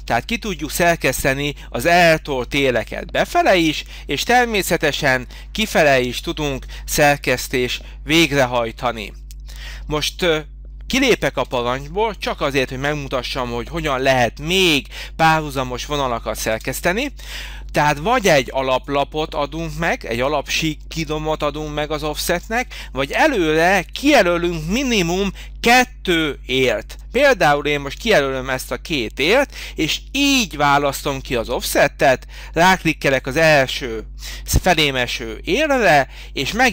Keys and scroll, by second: 11.5 Escape.